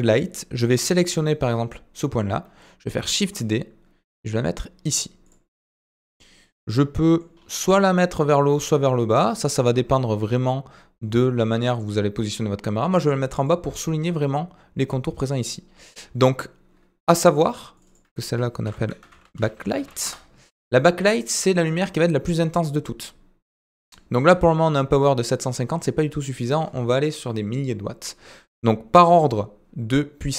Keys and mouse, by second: 5.3 typing, 6.1-7.3 middle drag, 8.3 typing, 17.7 click, 17.8-20.7 drag.